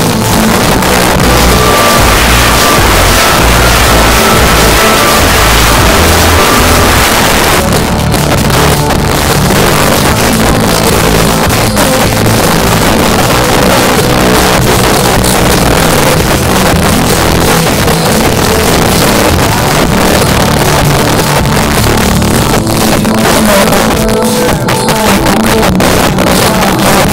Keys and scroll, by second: 7.0 Page_Down.